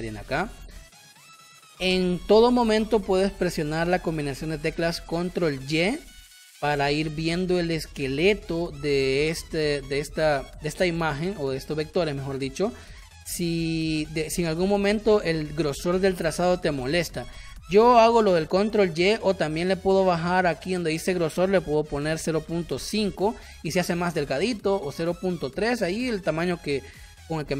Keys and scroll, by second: 0.1 space, 5.7 ctrl+y, 12.6 space, 14.7 ctrl+y, 18.2 ctrl+y, 21.9 0, 22.4 5, 22.7 Return.